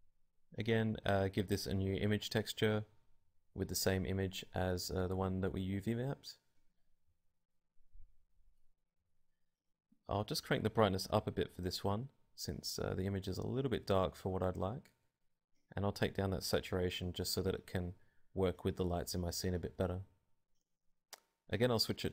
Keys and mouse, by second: 2.1 middle click, 4.7-7.1 drag, 8.1 click, 12.2 click, 13.6 click, 15.9-17.1 drag, 19.1-20.4 drag, 21.3 click.